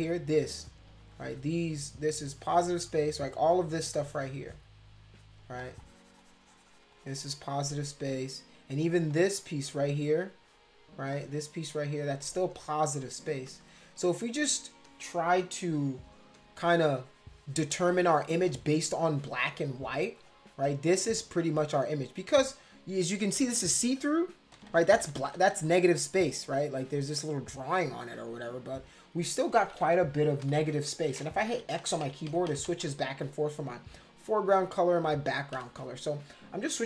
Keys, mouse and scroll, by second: 0.3 click, 0.6 click, 0.9 click, 2.1 click, 3.0 click, 3.9 click, 4.4 click, 5.6 click, 6.6 click, 9.1 click, 9.9 click, 10.2 click, 11.1 click, 12.5 click, 13.0 click, 13.5 click, 13.6 click, 14.5 click, 14.8 click, 15.1 click, 15.8 click, 16.3 click, 16.8 click, 17.7 click, 17.9 click, 18.1 click, 18.5 click, 18.7 click, 19.4 click, 19.6 click, 19.8 click, 20.2 click, 21.1 click, 24.5-25.5 typing, 25.7 click, 26.4 click, 27.6 click, 30.4 x, 31.5-32.8 typing, 35.6 x.